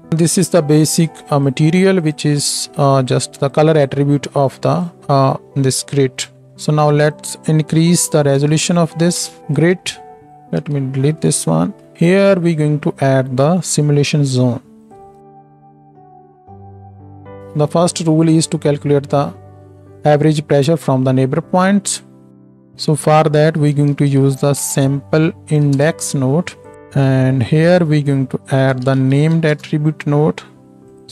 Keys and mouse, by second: 0.1 ctrl+space, 1.4 click, 2.4-3.0 drag, 4.8-7.2 drag, 10.3 click, 10.6-15.0 middle drag, 10.6-15.0 right drag, 10.6 x, 11.9 ctrl+space, 15.1-16.0 shift+drag, 15.2 shift+a, 26.7-27.7 drag, 30.9-31.1 drag.